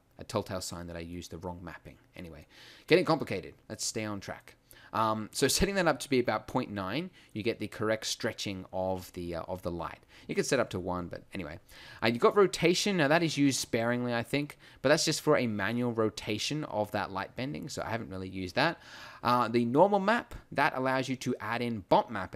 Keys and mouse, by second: 0.6 middle click, 2.2 middle click, 14.2-14.5 drag.